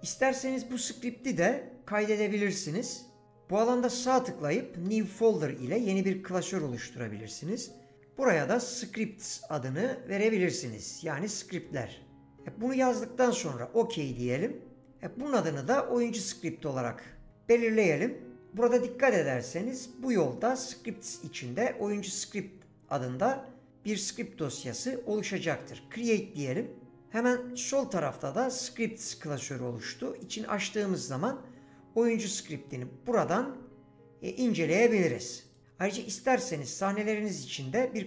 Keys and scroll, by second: 12.3 typing.